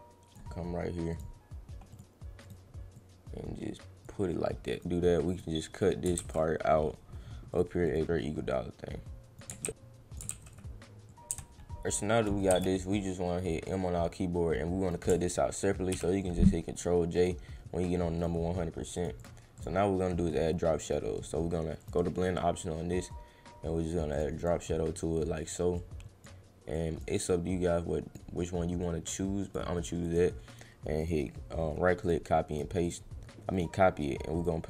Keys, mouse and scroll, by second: 1.1 click, 1.9 click, 2.4 click, 2.9-4.0 drag, 4.7 click, 5.3 click, 6.2 ctrl+z, 7.5 click, 7.9 click, 8.0-9.4 drag, 9.6 ctrl+x, 9.6 click, 10.3 ctrl+x, 11.1 click, 13.6-14.9 drag, 17.1 click, 18.2 right click, 18.9 click, 19.2 click, 19.5 click, 20.8 right click, 21.8 click, 24.1 click, 24.3 click, 25.7 click, 26.7 click, 27.2 click, 28.8 click, 30.0 click, 31.0 right click, 32.0 click, 32.5 click, 32.8 click, 33.5 right click, 34.4 click.